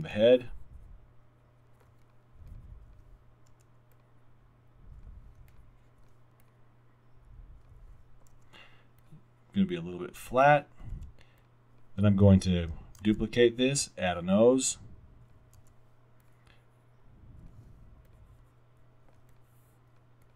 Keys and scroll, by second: 5.2 w, 8.4 r, 9.2 r, 11.0 alt+w, 13.0 super+d, 15.6 r.